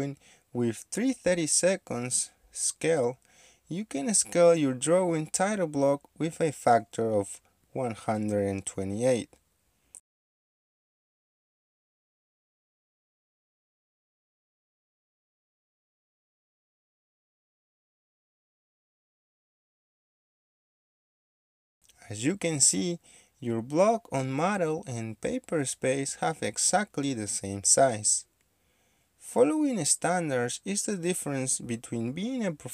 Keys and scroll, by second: 1.1 Escape, 9.5 KP_1, 9.8 KP_2, 9.8 KP_8, 10.0 Return, 10.9 KP_1, 11.0 KP_2, 11.1 KP_8, 12.7 KP_1, 13.0 KP_2, 13.0 KP_8, 13.2 Return, 15.3 Escape, 18.0 Escape, 19.2 m, 19.3 space, 21.5 Escape, 23.3 Escape, 28.0 Escape, 29.2 Escape.